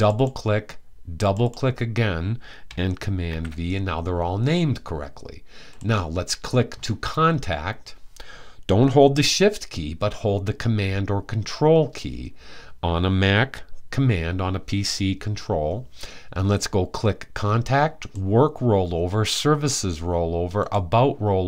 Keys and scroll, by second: 2.9 super+v.